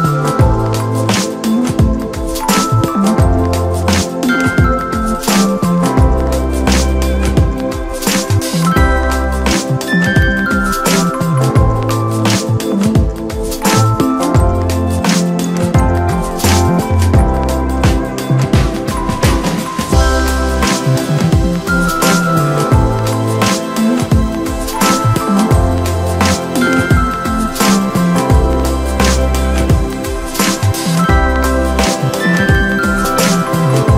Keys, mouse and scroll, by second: 0.5 KP_3, 2.2 click, 8.4 click, 9.5 shift+click, 10.4 click, 13.8 click, 14.6 click, 17.7 shift+drag, 18.5 shift+click, 19.3 KP_1, 20.8 e, 23.0 s, 25.4 KP_3, 26.7 click, 32.0 Tab, 32.2 scroll down 4, 32.5 middle click, 33.4 KP_1.